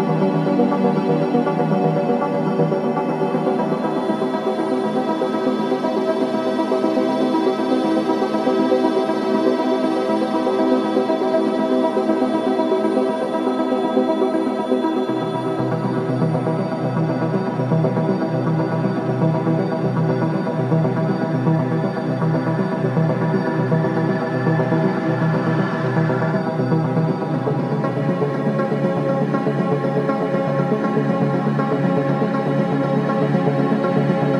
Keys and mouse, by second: 2.2-5.4 alt+drag, 2.2 typing, 5.9 alt+click, 6.6-7.3 typing, 7.2 ctrl+alt+click, 7.9 alt+shift+middle click, 8.2 ctrl+alt+click, 8.5-9.5 ctrl+alt+drag, 9.7 Tab, 11.4-14.6 alt+drag, 14.6 /, 15.5-17.6 alt+drag, 18.1-19.3 drag, 19.9 3, 20.9-21.9 drag, 22.3-24.0 drag, 24.0 g, 25.9 click, 27.8 Tab, 29.0-30.3 alt+drag, 30.5 typing, 31.7 ctrl+z, 33.5 ctrl+z.